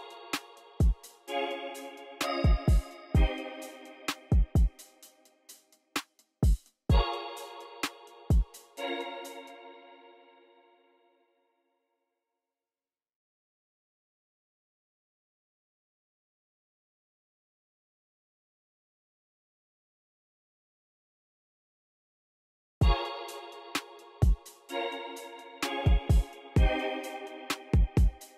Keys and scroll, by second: 2.8 super+j, 4.9 shift+super+BackSpace, 6.3 x, 9.1 space, 11.9 x, 13.2 super+w, 21.1 v, 22.7 space, 25.1 v, 28.2 v.